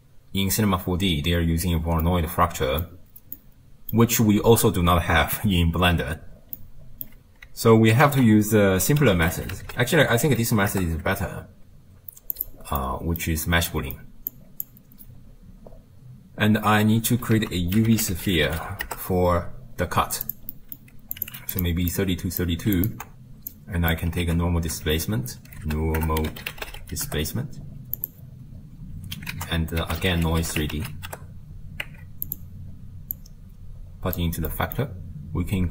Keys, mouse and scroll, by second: 2.0-6.4 middle drag, 6.6-8.1 middle drag, 8.1 ctrl+a, 10.3 o, 12.8-14.3 middle drag, 14.3 click, 17.8 ctrl+a, 18.7 e, 20.5 middle click, 21.2 click, 21.9 click, 22.8 ctrl+shift+click, 23.5 click, 24.3 ctrl+a, 29.4 ctrl+a, 33.2 drag, 34.5-35.7 middle drag.